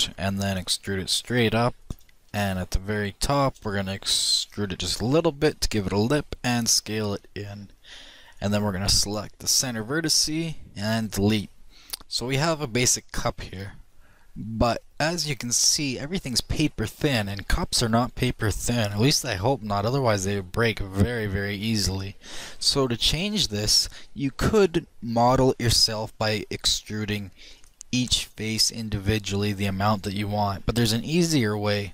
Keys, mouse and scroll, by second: 0.3 e, 2.7-3.5 middle drag, 3.5-4.5 drag, 4.2 e, 6.1 s, 9.6 click, 10.7-11.7 right drag, 10.7 x, 11.7-13.7 middle drag, 15.6-18.2 middle drag, 20.0-25.0 middle drag, 27.4 click, 28.1 right click, 28.5 e, 31.2 a, 31.5 a.